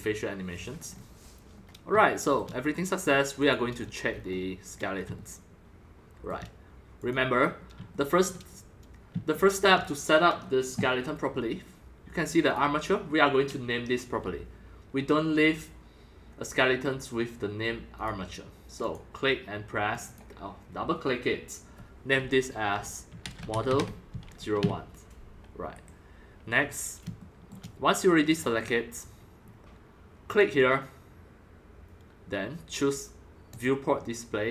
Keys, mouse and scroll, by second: 0.5 scroll, 0.8-1.3 scroll down 4, 1.3 scroll, 1.6-3.0 middle drag, 3.4 click, 3.8 scroll down 4, 4.0-4.3 scroll up 5, 4.6-7.1 middle drag, 7.1-8.2 drag, 8.1-8.6 shift+middle drag, 9.5-9.9 shift+middle drag, 12.4 click, 13.7-17.6 drag, 18.0 click, 18.8 click, 19.9 click, 20.0 click, 23.2-24.6 typing, 25.7 Return, 26.5 scroll up 3, 27.2 shift+middle drag, 28.2 click, 28.6-29.8 middle drag, 28.6-29.6 scroll, 29.0 click, 29.8-30.4 scroll down 3, 30.4-32.8 drag, 33.4-34.5 drag.